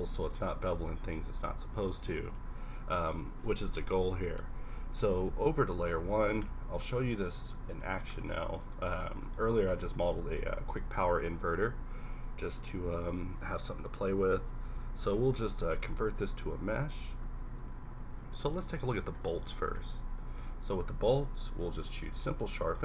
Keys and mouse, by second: 0.1 Tab, 0.9 Tab, 1.4 Tab, 1.9 Tab, 3.6 KP_1, 6.0 1, 8.9-12.0 typing, 12.9 alt+c, 16.1-18.0 typing, 21.0 q.